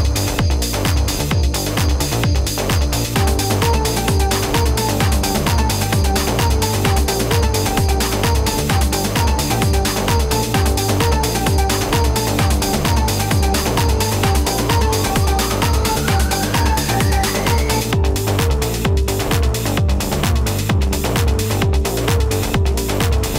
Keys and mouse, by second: 0.0-0.8 typing, 1.4 click, 2.7 Escape, 3.3-3.6 typing, 10.6 ], 12.9 space, 13.0 click, 13.2 space, 14.8 space, 15.0 click, 15.1 space, 17.1 space, 17.6 click, 20.0 space, 20.1 click, 20.2 space.